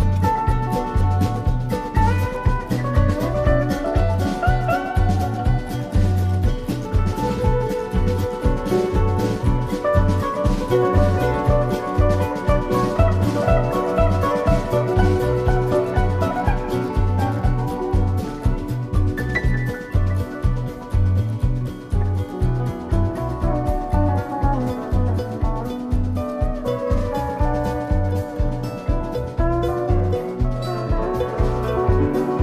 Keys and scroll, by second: 0.6 Right, 4.5 Left, 7.8 Right, 11.1 Left, 21.5 i.